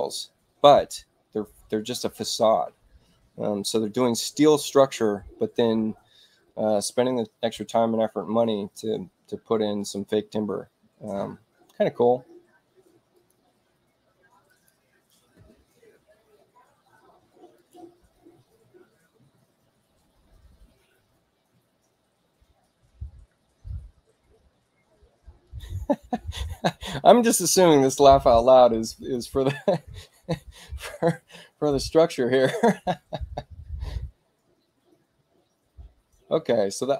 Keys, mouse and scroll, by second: 0.1 e, 13.0 click, 14.4 click, 17.5 click, 25.3 click, 28.9 click.